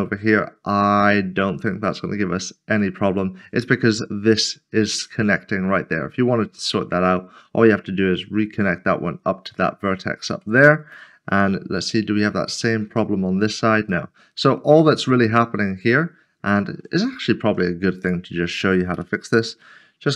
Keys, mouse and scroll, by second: 0.0 middle click, 9.5 middle click, 12.1 scroll down 1, 12.9 1, 14.1 middle click, 15.1 middle click, 18.0 click, 19.9-20.1 scroll down 1.